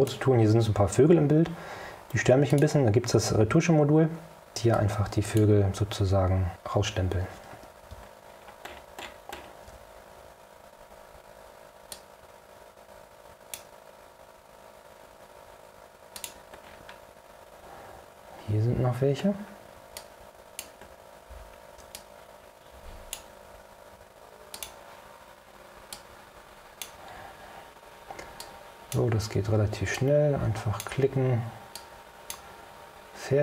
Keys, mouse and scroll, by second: 2.6 click, 6.0-6.8 drag, 12.0-13.9 drag, 16.3 click, 16.7-17.1 scroll down 2, 18.7-19.8 scroll up 4, 20.1 click, 21.1 ctrl+scroll down 2, 22.1-23.4 ctrl+drag, 24.7 click, 26.0 click, 28.5 click, 30.0-31.1 drag, 31.9 click.